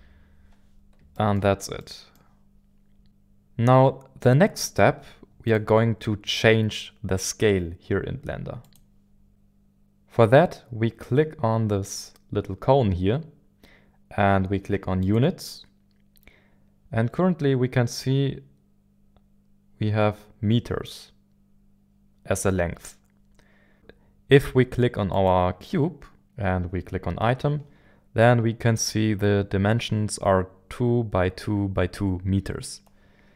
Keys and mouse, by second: 1.1-2.2 shift+middle drag, 8.6-15.2 drag, 25.2-33.3 drag.